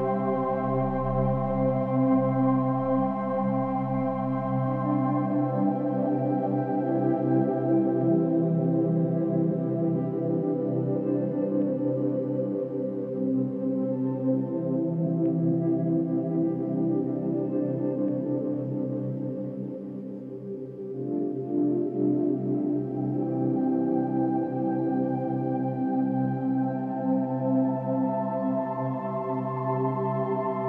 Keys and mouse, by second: 0.8-2.2 drag, 2.9 click, 3.9 click, 7.5 click, 8.2-9.8 drag, 10.0 ctrl+s, 11.1-14.5 drag, 15.4 click, 15.6 click, 16.5-18.5 typing, 18.8 Return, 20.9-24.2 drag, 24.2 4, 24.8 Return, 26.1 click, 28.2 click.